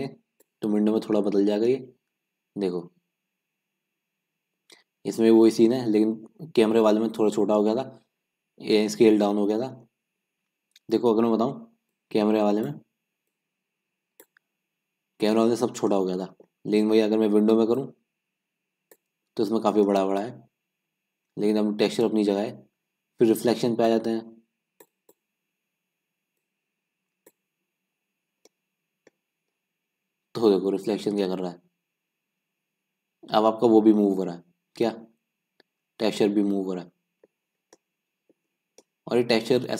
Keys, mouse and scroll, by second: 0.6-1.8 drag, 1.8-5.9 middle drag, 9.8-10.3 scroll up 2, 10.3-12.0 scroll down 1, 12.0-13.3 scroll down 1, 13.3-13.9 scroll down 1, 13.9-14.5 scroll down 1, 14.5-19.7 drag, 19.7-21.5 scroll up 2, 21.5-22.1 scroll up 1, 22.1-23.9 scroll up 1, 23.9-25.5 scroll up 1, 25.5 middle click, 25.6-28.0 drag, 28.0-28.3 scroll down 4, 28.3-29.3 scroll up 2, 29.3 scroll down 2, 29.5-32.5 middle drag, 37.5 scroll down 2, 37.8-38.3 middle drag, 38.3 scroll down 1, 38.4-39.0 scroll up 3, 39.0-39.7 middle drag.